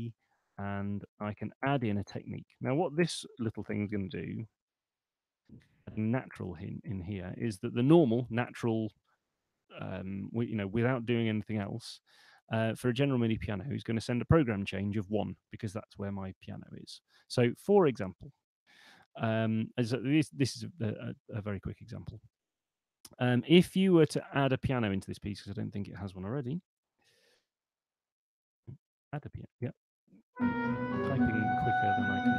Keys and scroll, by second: 3.2-4.1 typing, 22.6 super+2, 24.4 super+1, 26.4-27.7 typing, 30.5-31.4 typing.